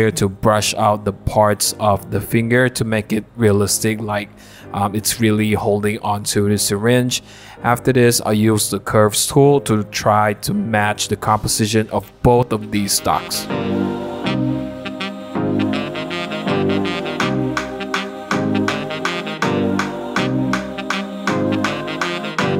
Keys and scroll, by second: 0.0 Return, 0.8 shift+Page_Up, 4.2 super+0, 10.1 super+=, 10.4 super+=, 11.2 super+=, 13.6-17.6 typing, 14.1 Return, 14.3 super+d, 14.9 super+d, 15.3 super+d, 15.9 super+d, 16.7 super+d, 16.7 super+=, 17.5 super+d, 18.6 Return, 18.6-22.5 typing, 18.7 super+d, 20.1 super+d, 20.7 super+d, 21.6 super+d, 22.1 super+d.